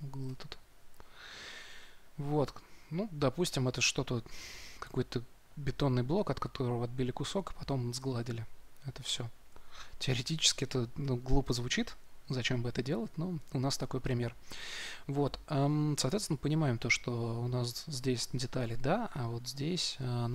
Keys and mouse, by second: 16.0 Tab.